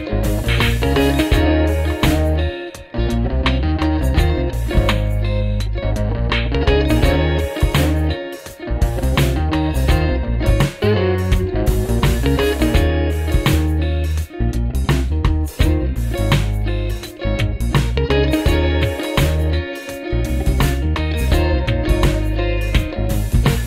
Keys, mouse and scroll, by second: 4.8 alt+click, 8.6 alt+click, 10.0 ctrl+=, 10.2 ctrl+=, 10.9 space, 12.3 space, 12.9 ctrl+t, 14.2 alt+click, 17.0 Up, 17.9 Up, 18.3 Down, 19.7 alt+click, 23.3 ctrl+-.